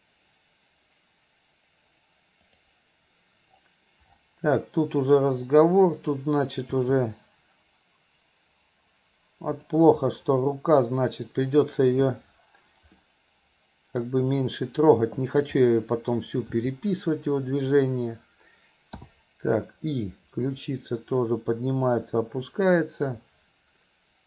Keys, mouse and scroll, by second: 2.5 click, 6.7 r, 13.0-14.0 middle drag, 15.2 click, 15.6-16.2 middle drag, 16.6 r, 20.0-24.2 drag.